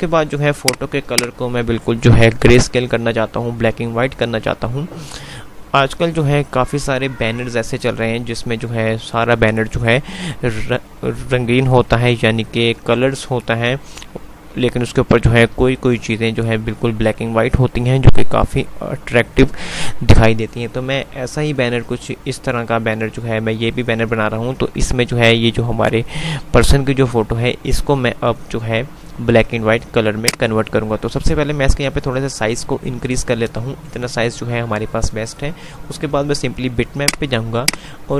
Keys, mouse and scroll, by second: 0.5 click, 30.5-32.6 drag, 37.1 click, 38.0 click.